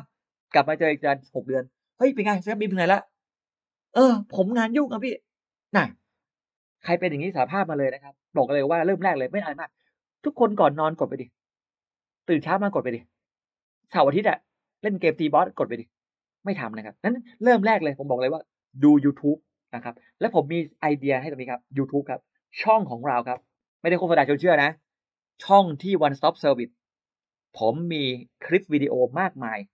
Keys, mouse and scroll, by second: 22.3 click, 23.9 click, 26.1-27.2 scroll down 3, 27.5-27.8 scroll up 1.